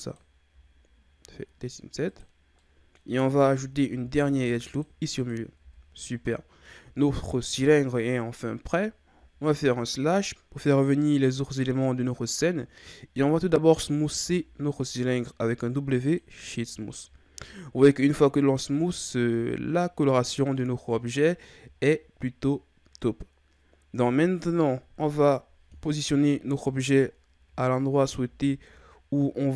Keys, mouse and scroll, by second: 2.4 i, 2.5 scroll up 1, 2.6-3.8 middle drag, 3.8 ctrl+r, 5.2 click, 5.6 Tab, 5.9-6.2 scroll down 1, 6.2-9.2 middle drag, 9.2 KP_Divide, 17.1-18.7 shift+scroll up 11, 18.7-20.5 shift+scroll up 8, 20.5-21.7 middle drag, 21.7-22.6 ctrl+scroll down 1, 22.6-24.9 ctrl+scroll down 5, 24.9 KP_1, 25.8-26.4 scroll down 4, 26.4-27.0 ctrl+scroll up 9, 27.0-27.7 shift+scroll down 6, 28.2 g.